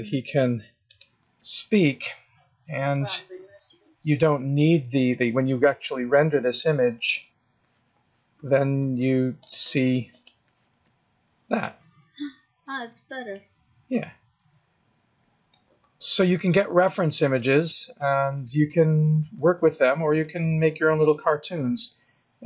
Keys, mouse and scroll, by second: 9.4 click.